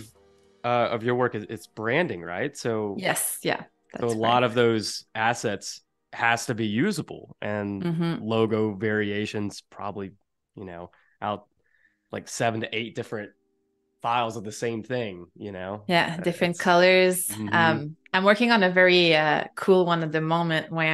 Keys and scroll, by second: 6.4 space, 19.6 super+-, 20.1 space.